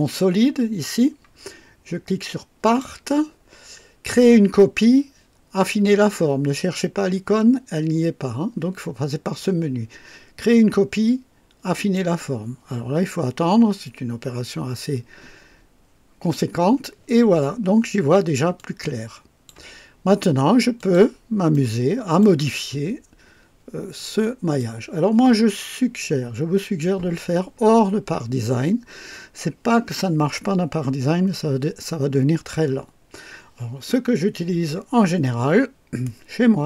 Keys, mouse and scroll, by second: 3.1 click, 11.9 click, 18.6-19.7 drag, 20.8 click, 21.5-22.4 right drag, 22.7-23.1 scroll up 2, 24.0-24.8 right drag.